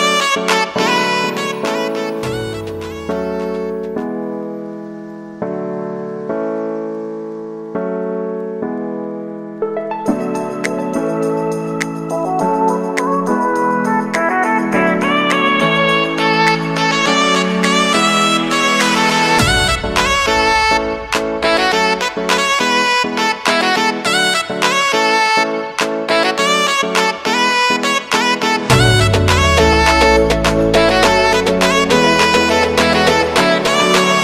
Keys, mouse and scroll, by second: 2.9 space, 5.2 click, 6.9 alt+scroll up 1, 8.3 space, 11.9 p, 14.1 click, 17.2 [, 18.3 Left, 18.6-19.5 typing, 19.8 Return, 22.1 [, 23.2 0, 24.2 Right, 26.6-29.3 typing, 29.8 Return, 31.4 typing, 32.6 Right, 33.1 shift+=.